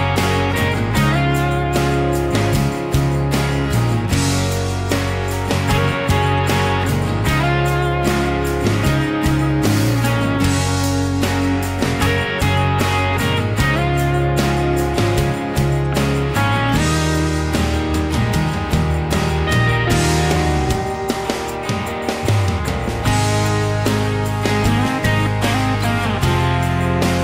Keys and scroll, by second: 0.5 m, 2.9 l, 7.2 p, 8.6 space, 9.8 e, 11.8 ctrl+a, 12.4 space, 15.3 Delete, 15.3 ctrl+x, 15.3 ctrl+v, 16.5 p, 22.5 Escape, 23.7 ctrl+s.